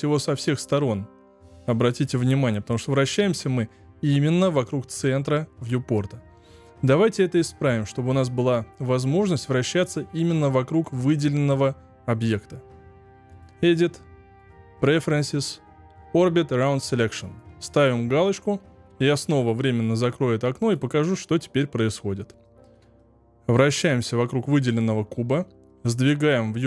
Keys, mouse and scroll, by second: 13.2 click, 22.4-26.6 shift+middle drag.